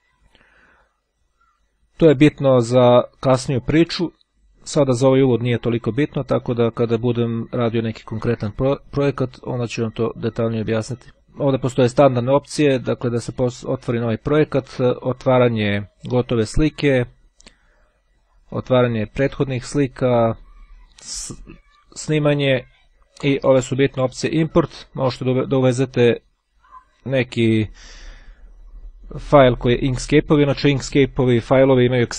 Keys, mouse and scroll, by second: 7.0-8.4 drag.